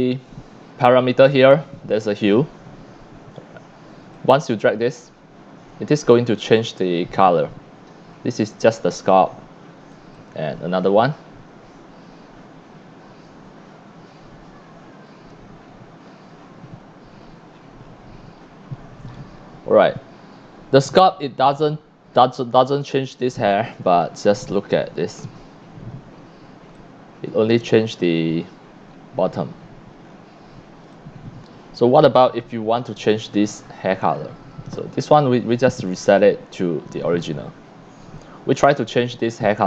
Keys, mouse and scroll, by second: 4.1-4.6 drag, 9.9 click, 11.4-12.8 scroll down 14, 13.5 scroll up 1, 14.5-15.5 scroll up 3, 15.5-18.4 scroll down 16, 18.4-20.3 scroll up 11, 21.3 click, 23.8-24.7 drag, 23.8 c, 25.9 scroll up 3, 26.7 x, 26.8-27.6 drag, 27.8-28.4 scroll up 3, 29.0 scroll down 1, 30.0 scroll down 4, 30.8 c, 30.9-32.0 drag, 32.1 x, 32.2-33.0 drag, 35.8 click, 37.6 scroll up 1.